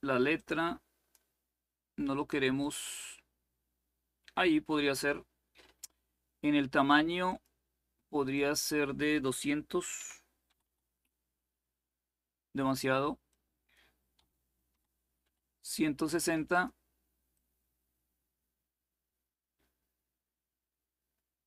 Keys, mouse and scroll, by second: 0.0-1.4 drag, 2.3 click, 7.0 click, 8.0-9.3 drag, 9.9-10.8 typing, 13.0-14.1 drag, 13.8-14.9 typing, 16.2-21.4 drag.